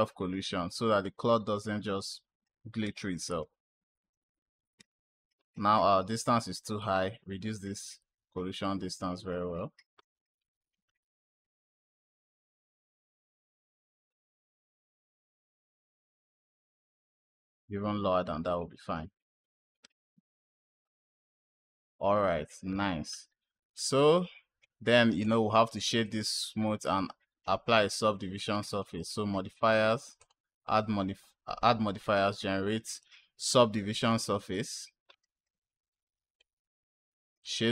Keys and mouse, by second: 2.0 click, 2.7 space, 4.6 space, 6.6-9.5 drag, 10.2 click, 10.8 space, 14.0 space, 17.4-18.4 drag, 19.3 click, 19.8 space, 22.6 space, 23.8 click, 25.1 click, 25.9-26.7 drag, 28.6 click, 30.0-34.3 drag, 35.8 click, 36.1 click, 36.7-37.4 right drag.